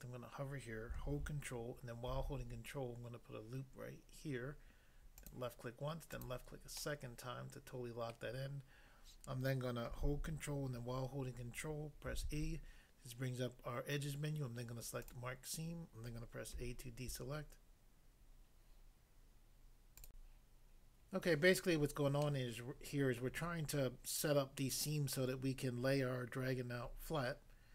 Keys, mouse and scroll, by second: 2.2 ctrl+r, 5.2 click, 6.1 click, 6.8 click, 6.8 middle click, 8.1 middle click, 12.1 ctrl+e, 15.1 click, 16.5 a, 20.0 click, 20.2 click, 22.2 middle click, 23.2 middle click, 26.5-26.8 scroll up 1.